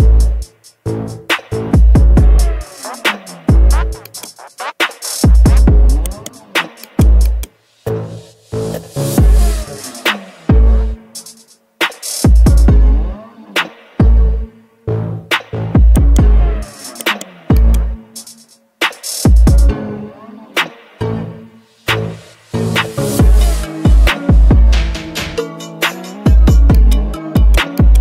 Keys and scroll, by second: 2.0 ctrl+shift+i.